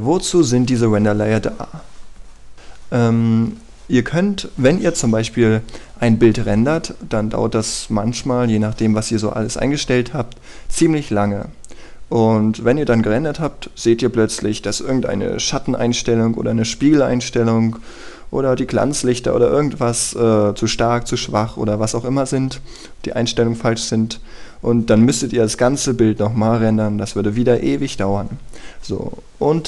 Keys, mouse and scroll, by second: 0.2 click, 0.9-1.4 scroll up 1, 1.4-1.7 scroll down 1, 1.7-5.0 scroll up 1.